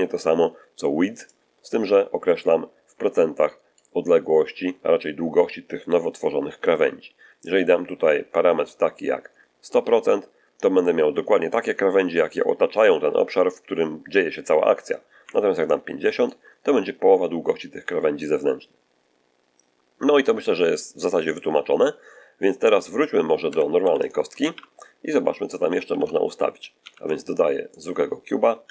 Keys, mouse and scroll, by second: 1.2-3.8 drag, 4.3-4.8 scroll down 1, 7.3-16.3 drag, 23.4 Tab, 23.7 x, 23.9 click, 24.3 shift+a, 25.8 shift+c, 27.6 shift+click, 28.5 1.